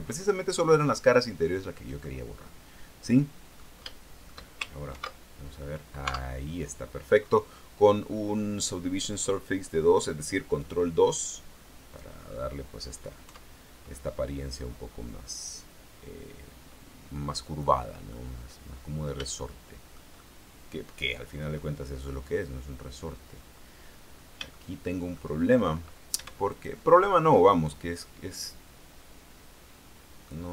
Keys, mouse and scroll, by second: 0.2-0.6 scroll up 1, 1.7 scroll down 1, 2.2-4.0 middle drag, 4.0 shift+middle click, 5.1 ctrl+2, 5.6-6.0 scroll down 1, 6.2 Tab, 6.6-7.0 scroll down 1, 7.4-7.7 scroll up 1, 8.3 scroll down 1, 10.8 click, 12.0 scroll down 1, 12.4-12.7 scroll up 1, 13.5 Tab, 14.1-14.5 scroll up 2, 14.9-18.0 scroll down 2, 18.3-19.5 middle drag, 19.6 shift+middle click, 20.4-21.9 shift+middle drag, 22.2 scroll up 2, 23.3 scroll up 2, 24.2-24.5 scroll up 2, 24.7 shift+middle click, 26.7 alt+shift+right click, 28.5-30.5 drag.